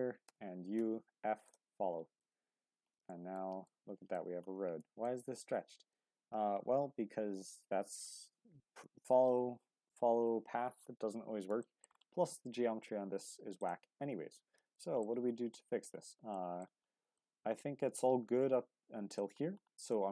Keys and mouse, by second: 0.2 u, 2.2 Tab, 3.1 shift+middle drag, 3.7-4.1 middle drag, 4.8 shift+middle click, 5.7 shift+middle click, 11.6 shift+middle drag, 12.4 Tab, 13.5-14.6 drag, 14.8 shift+middle click, 15.6 shift+middle click, 16.3 shift+middle click, 17.2 shift+middle click, 19.9 shift+middle click.